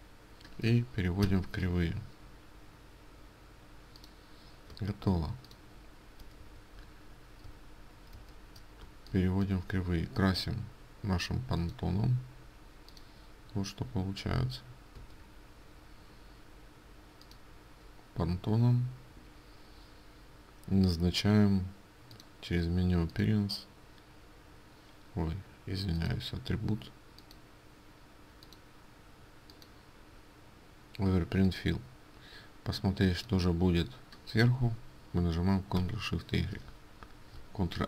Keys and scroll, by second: 1.4 ctrl+shift+o, 4.9 ctrl+space, 6.5 ctrl+z, 8.2 ctrl+shift+z, 15.0 ctrl+z.